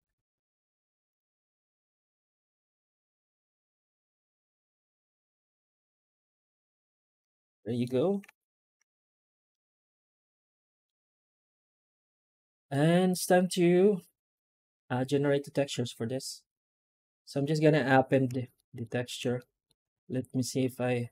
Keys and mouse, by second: 7.1-7.7 middle drag, 8.1 alt+h, 9.4-10.7 middle drag, 11.5 middle drag, 11.8 alt+middle click, 12.5-17.5 middle drag, 18.4 shift+middle drag, 19.3 shift+middle drag.